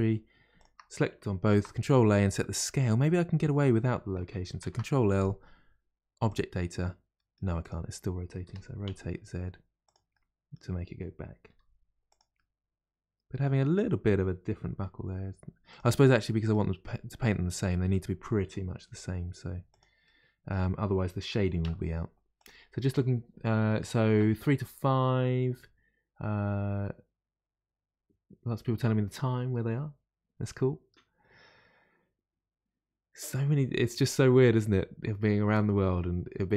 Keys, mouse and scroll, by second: 0.5 shift+click, 1.5 ctrl+a, 2.6 ctrl+a, 4.6 ctrl+l, 6.3 ctrl+l, 7.1-7.6 middle drag, 7.6 click, 8.4 r, 8.5 r, 10.1-11.5 middle drag, 11.5 r, 12.3-14.7 middle drag, 14.7 g, 14.7 g, 16.1-18.9 middle drag, 18.9 r, 20.0-21.3 middle drag, 21.3 r.